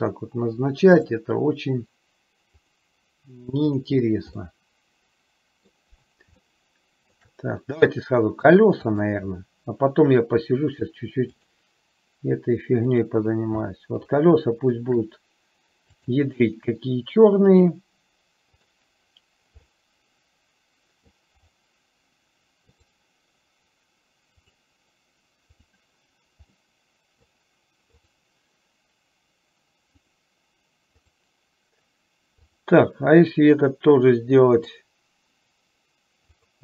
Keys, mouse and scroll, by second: 1.1 click, 2.8-4.1 drag, 4.5-6.2 middle drag, 6.8 shift+middle click, 8.2 middle click, 9.2 click, 11.5-13.3 drag, 13.9-15.1 shift+middle drag, 16.2 click, 17.7-19.3 drag, 19.9-21.3 middle drag, 24.6-26.1 drag, 26.8 middle click, 28.2 click, 30.1-31.4 drag, 34.7-36.6 drag.